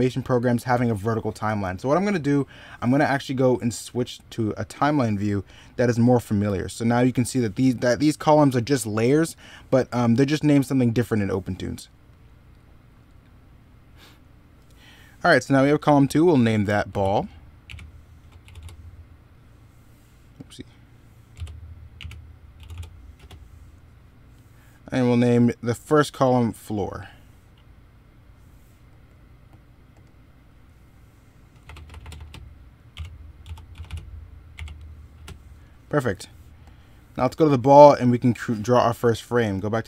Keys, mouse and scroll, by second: 0.3 middle click, 11.4 middle click, 23.5 middle click, 35.4 middle click, 37.1 middle click, 38.8 ctrl+z, 39.3 e.